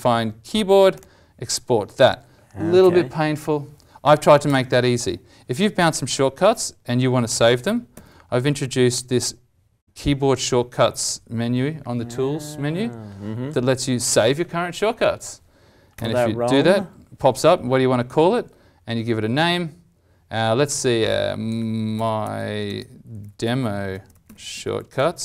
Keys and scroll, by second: 7.9 alt+t.